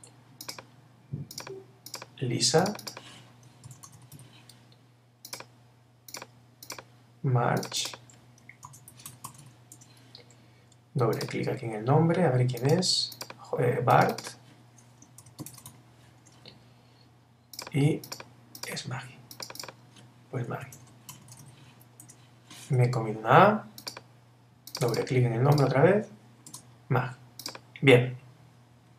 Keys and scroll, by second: 3.7 shift+l, 8.7 shift+m, 9.8 Return, 15.2 shift+b, 16.2 Return, 20.6 shift+m, 22.0 Return.